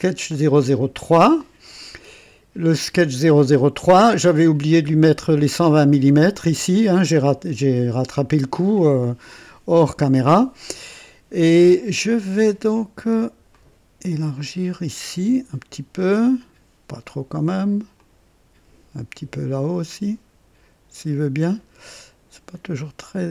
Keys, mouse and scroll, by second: 3.7-4.4 right drag, 13.4-15.8 drag, 17.9 click, 19.9-21.2 drag, 21.5 scroll up 1, 21.9 right click.